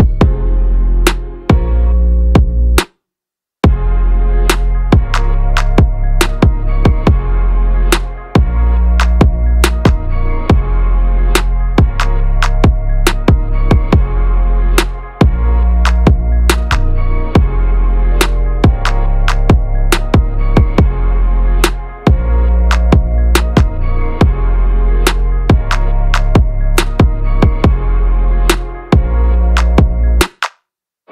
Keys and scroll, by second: 0.1 ctrl+-, 12.4 ctrl+v, 13.3 ctrl+a, 20.2 ctrl+=, 21.1 space.